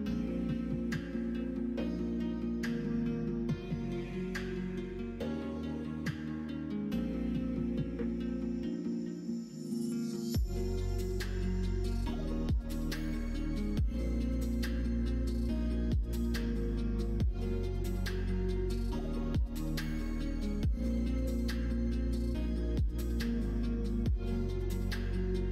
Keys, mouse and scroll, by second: 0.3-2.0 drag, 2.3-3.3 middle drag, 3.3 scroll down 1, 3.8 scroll up 1, 3.8 middle click, 3.9 scroll down 1, 4.2 s, 6.1 middle click, 6.8 middle click, 7.8 click, 8.6 l, 9.0 middle click, 10.1 s, 11.5 ctrl+z, 11.8 middle click, 13.0 s, 14.6 scroll up 1, 14.7 middle click, 14.8 scroll down 1, 15.4-16.6 drag, 20.3 scroll up 1, 20.3 middle click, 20.5 scroll down 1, 20.8 middle click, 21.2 middle click, 21.4 scroll down 1, 21.6 scroll up 1, 21.7 middle click, 21.7 scroll down 1, 21.9 middle click, 22.2 scroll up 1, 22.2 middle click, 22.7-23.3 scroll up 2, 22.8 middle click, 23.3 middle click, 23.9 shift+middle click, 24.2 middle click, 24.9 shift+middle click.